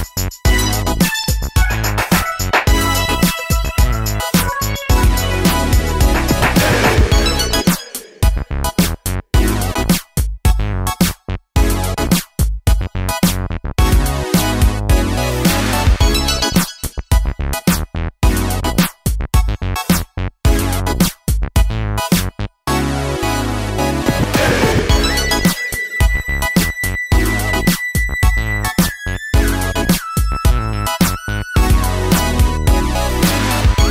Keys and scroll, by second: 4.9-5.7 typing, 7.4-8.2 typing, 11.8 3, 11.9 Return, 14.0 Return, 27.6 3, 27.6 Return, 30.4 super+c, 31.8 super+v, 32.8 super+v.